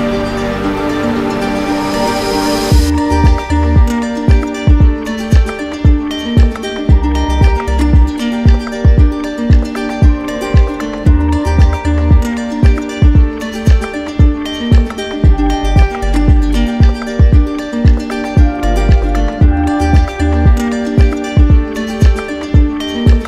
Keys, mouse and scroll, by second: 0.8 click, 1.6 click, 2.1 alt+click, 2.7-5.2 alt+drag, 5.7 click, 6.2 alt+click, 7.2 alt+click, 7.6 click, 8.8 click, 9.4 click, 9.4 d, 11.0 alt+right click, 12.5 d, 13.6 shift+click, 13.7 shift+click, 14.1 shift+click, 14.7 shift+click, 15.7 right click, 17.6 shift+click, 18.1 click, 18.5 shift+click, 18.8 shift+click, 19.0 shift+click, 20.1 right click, 21.0 click, 22.6 z.